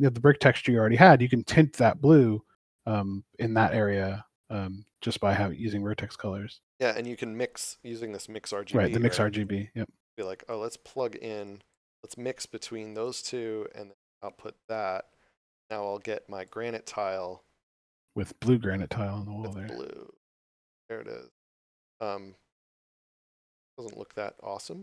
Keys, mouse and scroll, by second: 0.1 scroll up 1, 0.8 shift+middle click, 1.5 scroll down 1, 7.0 click, 14.5 click, 23.4 shift+middle click.